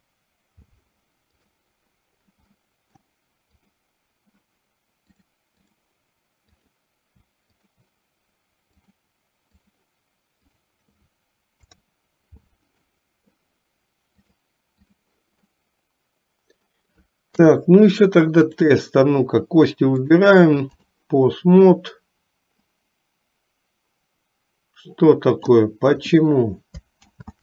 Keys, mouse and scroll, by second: 2.6 middle click, 3.6 click, 5.2 click, 6.8 click, 7.8 shift+click, 8.9 click, 11.6 ctrl+p, 14.3 click, 15.7-17.0 middle drag, 17.5 KP_3, 20.2 click, 22.9-25.8 drag, 27.1 ctrl+z.